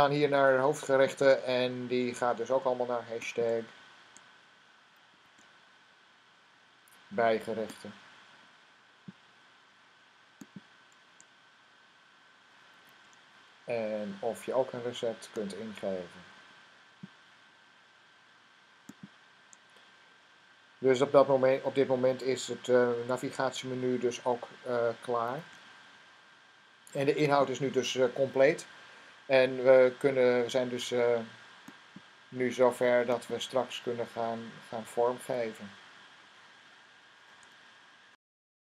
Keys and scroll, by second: 5.0 #, 12.6 #, 25.1 #.